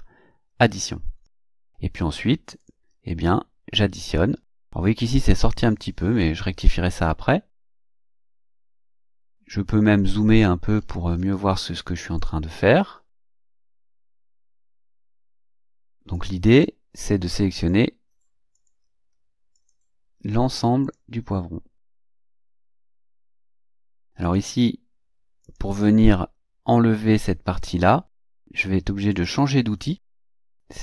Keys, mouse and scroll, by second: 0.7 click, 2.6 click, 7.5 click, 8.4 click, 9.0 click, 10.3-11.3 ctrl+scroll up 6, 12.2 click, 13.2 click, 14.2 click, 15.0 click, 16.1 click, 17.7 click, 18.5 click, 19.5 click, 20.8 click, 22.0 click, 22.8 click, 23.5 click, 24.2 click, 25.4 click, 26.5 scroll down 2, 27.6 scroll up 2, 29.1 click.